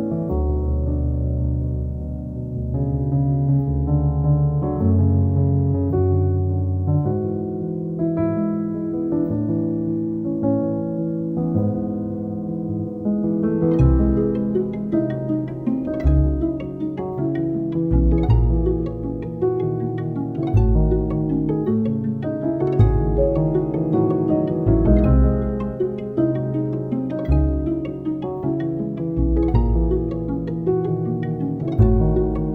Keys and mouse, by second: 0.7 middle click, 1.0 i, 2.4 click, 2.8 KP_1, 3.1 g, 3.7 s, 4.4 middle click, 4.6 e, 5.6 Tab, 5.9 middle click, 6.5 Tab, 6.7 alt+middle click, 7.2 1, 7.3 click, 7.4 alt+middle click, 7.7 KP_1, 8.0 alt+middle click, 8.3 alt+middle click, 8.5 KP_1, 8.8 g, 9.9-12.1 typing, 10.2 alt+middle click, 12.6 alt+middle click, 13.1 click, 13.2 shift+click, 13.5 KP_3, 13.7 g, 14.5 Tab, 14.6 click, 14.7 alt+middle click, 15.6 shift+middle click, 15.8 alt+middle click, 16.0 alt+middle click, 16.3 alt+Tab, 16.3 alt+middle click, 16.6 shift+middle click, 16.8 KP_3, 17.4 3, 19.0 middle click, 19.9 KP_1, 20.4 e, 21.8 r, 23.4 g, 24.4-26.9 typing, 28.4 s, 29.1-30.2 alt+middle drag, 30.3 g, 30.8 alt+middle click, 31.5 ctrl+r, 32.2-32.5 typing, 32.2 click, 32.4 middle click.